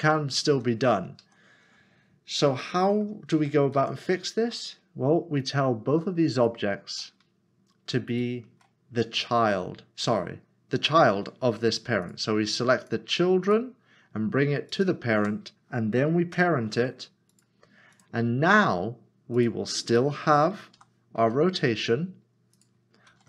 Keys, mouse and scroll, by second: 2.6 middle click, 3.3 ctrl+z, 4.6 ctrl+click, 5.4 click, 6.3 shift+click, 8.1 shift+click, 12.0 shift+click, 13.4 shift+click, 16.3 ctrl+p, 20.8-21.2 typing, 22.5 click, 23.1 ctrl+z.